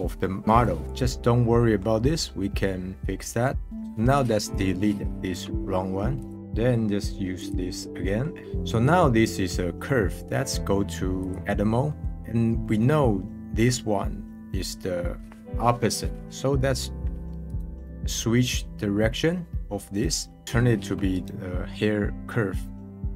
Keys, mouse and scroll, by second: 1.5-2.0 middle drag, 3.7 click, 6.2 click, 6.3-7.3 middle drag, 7.3 click, 8.0-8.4 middle drag, 11.2 click, 11.9-17.4 middle drag, 17.4-19.1 right drag, 21.1-23.1 right drag.